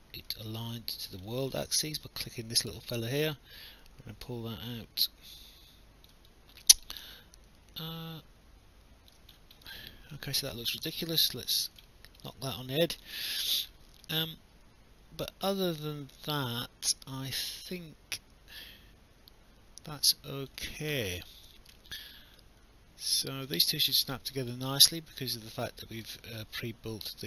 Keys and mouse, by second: 0.4 alt+click, 1.3 alt+middle click, 3.6 click, 6.3 alt+click, 10.0 alt+click, 10.7 ctrl+z, 11.2 alt+click, 11.9 alt+middle click, 12.4 alt+click, 13.7 alt+middle click, 14.2 alt+click, 21.5 alt+click, 21.8 alt+middle click, 22.4 alt+click, 24.3 alt+click, 24.5 alt+middle click, 26.2 alt+middle click.